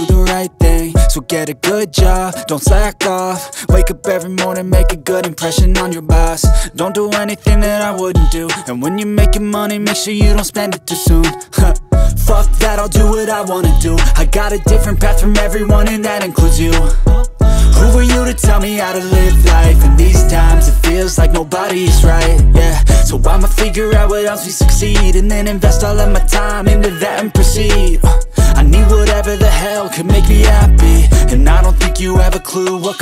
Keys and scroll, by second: 0.3 shift+a, 2.2 1, 2.3 Return, 3.2 s, 4.1 g, 4.2 z, 4.9 ctrl+2, 7.4 1, 9.6 x, 10.6 2, 10.7 Return, 12.2 g, 12.4 y, 13.2 shift+d, 13.5 y, 16.2 ctrl+z, 17.5 shift+d, 18.0 y, 21.1 g, 21.5 z, 24.5 g, 24.8 y, 27.1 3, 27.2 Return, 28.1 shift+d, 28.2 y.